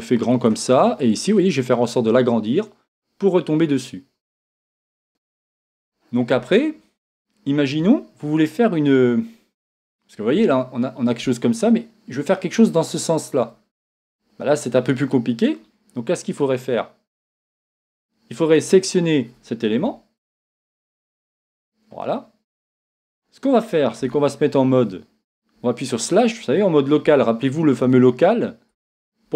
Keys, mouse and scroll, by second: 1.5-4.5 drag, 5.7 scroll down 1, 6.5-15.8 shift+middle drag, 14.1 scroll up 1, 18.5 click, 20.3 click, 22.1-24.0 middle drag, 23.2 scroll down 1, 24.0 Tab, 25.6 KP_Divide, 25.6-29.3 middle drag, 27.1 Tab.